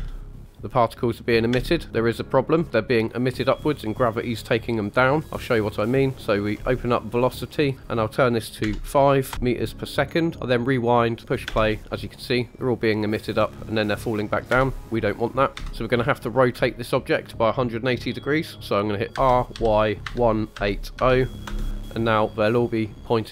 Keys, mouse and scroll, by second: 1.5 space, 2.6 scroll up 1, 6.5 click, 7.1-7.7 scroll down 2, 7.8 click, 10.5 click, 11.4 space, 14.5 space, 15.5 click, 15.5 KP_1, 16.2-16.7 scroll up 2, 16.7-17.1 shift+middle drag, 19.1-20.9 typing, 21.4 Return.